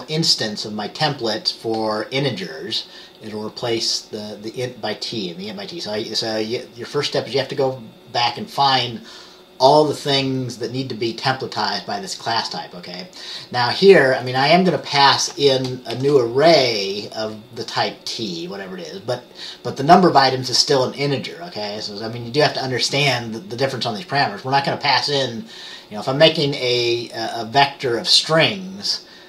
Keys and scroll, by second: 16.0 t.